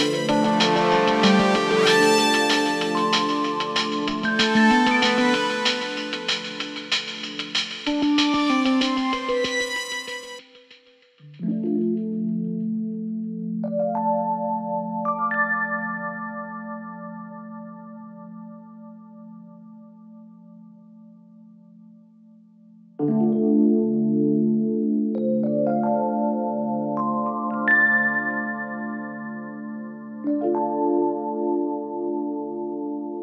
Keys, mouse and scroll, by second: 0.4 click, 0.5 s, 1.3 click, 1.6 click, 1.8 s, 2.5 click, 2.6 s, 3.2 click, 3.3 s, 3.8 click, 3.9 s, 4.8 click, 5.0 s, 5.8 click, 5.9 s, 6.5 click, 6.7 s, 7.2 click, 7.7 shift+click, 8.1 s, 9.1 click, 9.2 click, 9.5 shift+click, 9.8 shift+click, 10.0 s, 11.0 click, 11.3 shift+click, 11.4 s, 11.8 click, 11.9 scroll down 1, 12.3 click, 13.8 click, 14.6 scroll down 3, 15.1 scroll up 1, 15.3 click, 16.5 scroll down 2, 16.7 scroll up 1, 17.0 click, 17.5 click, 17.8-18.2 scroll down 1, 18.2 click, 18.8 shift+click, 19.7 click, 20.4-21.1 scroll down 2, 21.1 shift+click, 21.6-22.2 scroll down 11, 22.4 shift+click, 22.8-23.5 scroll down 12, 23.5 shift+click, 24.4-24.7 scroll down 12, 25.0 scroll up 13, 26.9 ctrl+j, 27.3 click, 27.5 click, 28.4 shift+d, 29.7 ctrl+z, 29.8 ctrl+z, 30.0 click, 30.6-31.6 right drag, 32.3 shift+d.